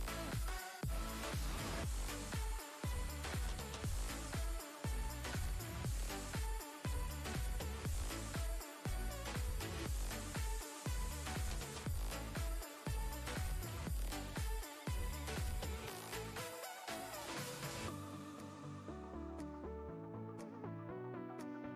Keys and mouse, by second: 7.1 click, 18.5 click.